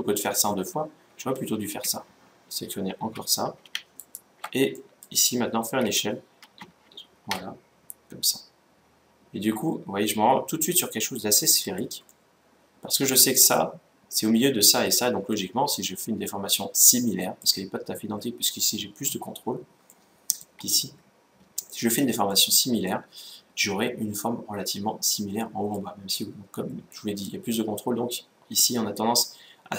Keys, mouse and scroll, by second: 0.3 ctrl+z, 0.8 ctrl+z, 1.3 ctrl+z, 3.7-5.4 right drag, 4.5-6.1 middle drag, 5.5 s, 11.8-13.4 middle drag, 15.1-18.4 middle drag, 18.4-19.6 scroll up 1, 19.6-21.3 middle drag, 21.5-23.6 middle drag, 23.9 middle click, 25.2-28.6 middle drag.